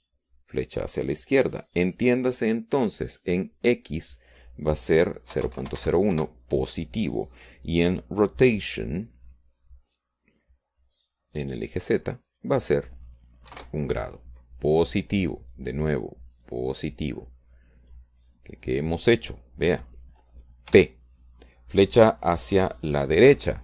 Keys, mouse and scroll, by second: 0.4-1.1 drag, 1.8-3.5 drag, 6.9 click, 8.4 KP_0, 8.5 KP_Decimal, 8.6 KP_0, 8.8 KP_1, 9.2 KP_Enter, 15.3 click, 15.6-19.4 middle drag, 16.5 KP_1, 19.4 click, 20.9 click.